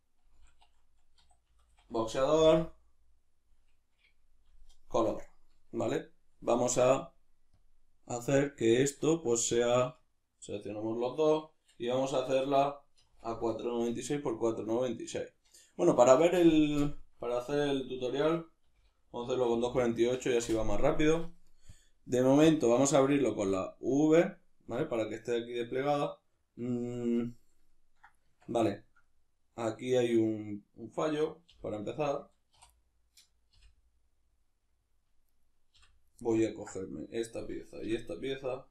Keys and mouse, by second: 16.3 BackSpace, 24.7-31.0 middle drag, 28.3 Tab, 31.0 right click, 31.5 l, 32.5 3, 32.7 right click, 33.5 l, 35.3 right click, 35.7 l, 36.5-38.7 ctrl+middle drag, 37.8 l.